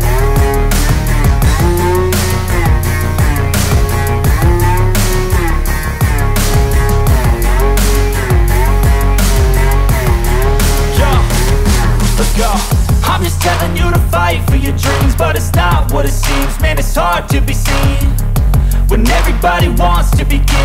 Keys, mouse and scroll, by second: 0.2-1.0 scroll up 1, 1.5-4.9 drag, 4.9-5.5 scroll down 1, 6.3-7.3 scroll up 1, 8.3-14.2 drag, 14.2-20.6 drag, 16.8 typing.